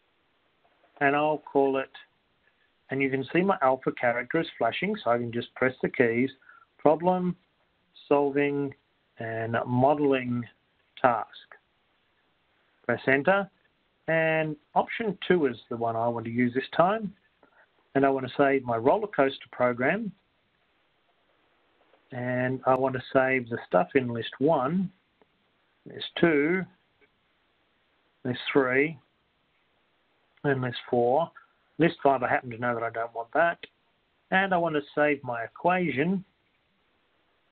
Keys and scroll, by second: 0.4 Return, 6.6 8, 10.1 /, 12.6 4, 13.3 Return, 13.6 ÷, 16.6 2, 18.6 Return, 25.7 Return, 26.9 Down, 26.9 0, 27.3 Return, 28.3 Down, 29.7 Return, 29.7 Down, 29.7 2, 30.0 Return, 30.0 /, 30.3 Down, 31.1 Return, 32.9 Down, 35.7 Return, 37.1 Down.